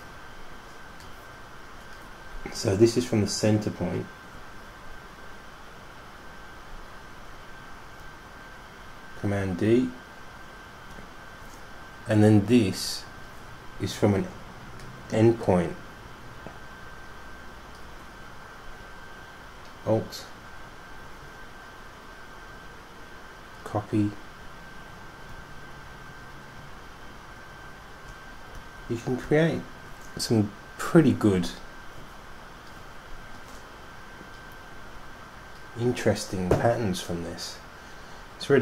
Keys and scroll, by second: 8.2 super+d, 8.7 super+d, 8.8 super+d, 9.1 super+d, 9.3 super+d, 9.5 super+d, 9.7 super+d, 10.3 super+d, 10.7 super+d, 11.2 super+d, 12.2 super+d, 25.5 super+d, 26.0 super+d, 26.1 super+d, 26.1 super+d, 26.3 super+d, 26.4 super+d, 26.7 super+d, 26.9 super+d, 27.1 super+d, 28.0 super+d, 28.4 super+d, 28.7 super+d.